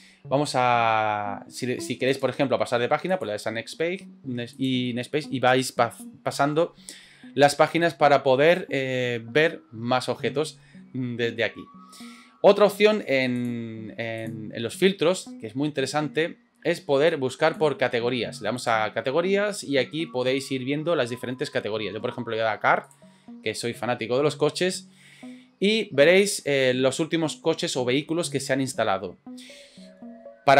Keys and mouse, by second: 2.1-2.7 drag, 3.2 click, 4.6-11.6 drag, 13.4 click, 14.2 click, 17.1 click, 18.6-23.0 drag, 26.2-29.3 drag.